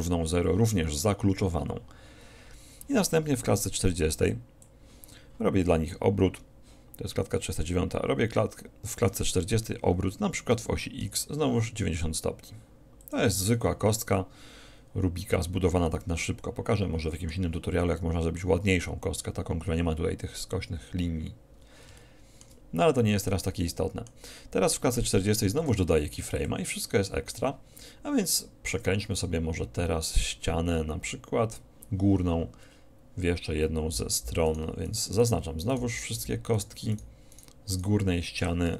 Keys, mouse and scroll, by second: 4.3-6.3 drag, 7.6-9.5 drag, 10.7 r, 13.2 click, 13.6 middle click, 14.0-15.0 drag, 15.0 middle click, 18.0-19.1 middle drag, 19.1 click, 19.7 middle click, 19.9-21.1 drag, 21.1 middle click, 22.1-25.6 middle drag, 25.7 i, 34.5-36.7 right drag, 36.7-38.7 drag.